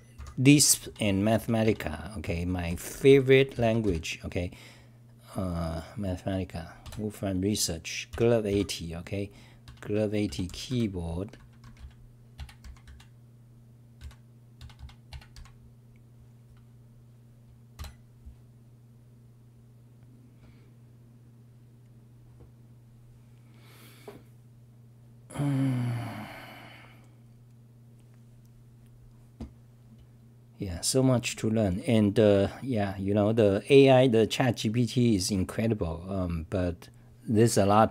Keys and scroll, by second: 0.9-3.5 typing, 9.7-11.1 typing, 12.9 d, 14.0 f, 14.6 d.